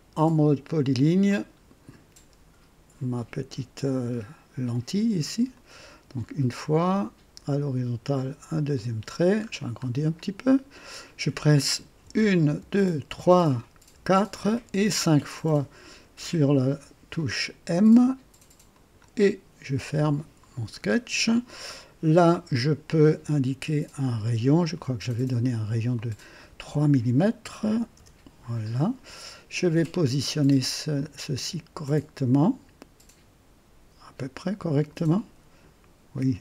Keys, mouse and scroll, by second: 1.2 click, 5.5 click, 8.7 click, 9.3-9.7 scroll up 2, 10.0 right click, 12.0-14.6 typing, 18.6 click, 19.9 right click, 21.6 right click, 24.2 click, 25.9 click, 27.6 KP_3, 27.9 KP_Enter, 30.9-34.8 drag.